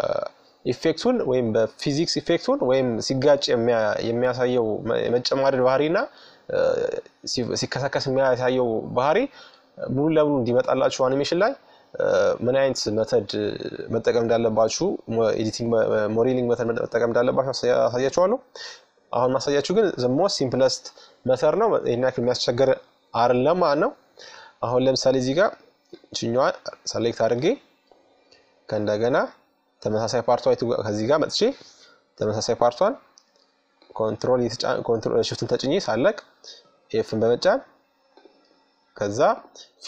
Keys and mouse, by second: 0.9-3.6 right drag, 1.8-3.8 drag, 3.4 middle click, 6.5-15.0 middle drag, 16.7-18.3 right drag, 17.5 f, 18.5 right click, 18.6 KP_Subtract, 22.3-24.5 middle drag, 24.5-26.3 right drag, 29.9-32.3 middle drag, 32.3-34.1 right drag, 34.1 middle click, 35.1 f, 36.7-39.5 right drag, 38.7 f.